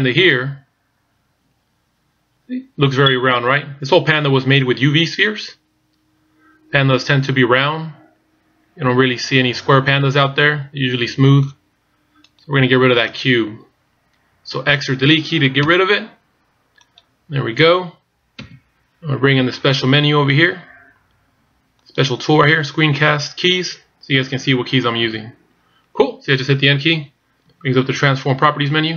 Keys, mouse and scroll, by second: 0.3 middle click, 25.1 n, 27.5-28.9 typing.